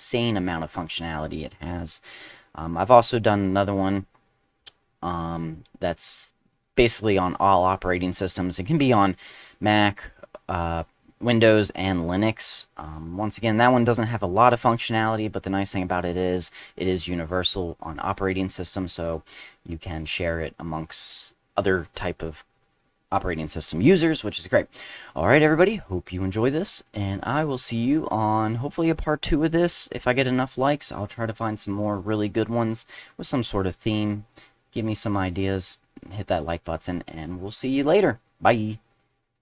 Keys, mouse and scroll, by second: 39.3 click.